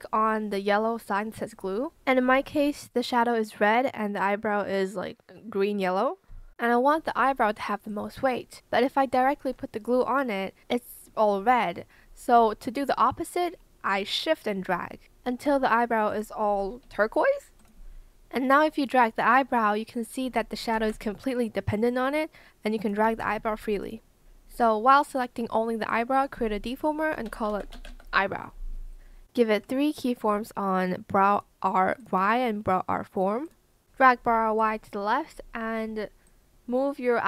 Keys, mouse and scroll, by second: 13.2 shift+click, 16.8 shift+Escape, 20.8 ctrl+z, 23.0 ctrl+z, 23.7 Escape, 26.9-28.4 typing, 31.9 shift+click, 36.2 shift+click.